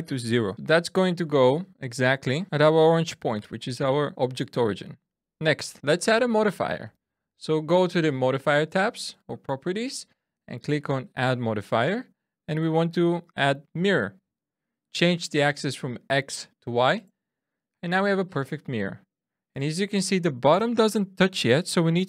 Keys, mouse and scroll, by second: 0.5 middle click, 1.3-2.0 scroll down 1, 9.3 click, 15.6 click, 16.3 click.